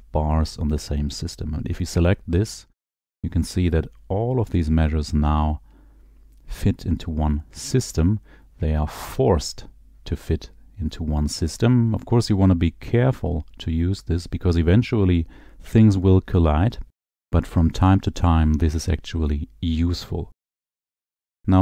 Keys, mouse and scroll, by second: 2.0 click, 3.0 click.